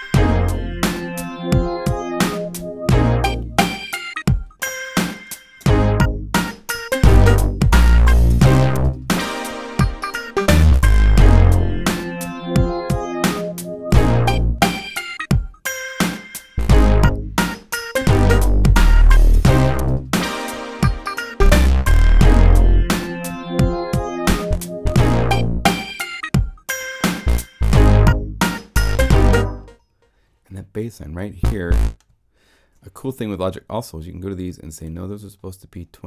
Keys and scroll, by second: 29.6 space.